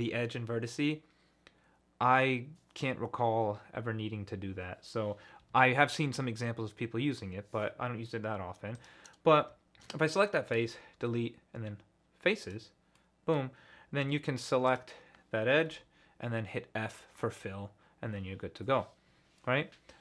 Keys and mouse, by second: 5.5 ctrl+z, 8.7 click, 10.6 Delete, 13.0 middle click, 13.2 click, 14.0 2, 15.7 f.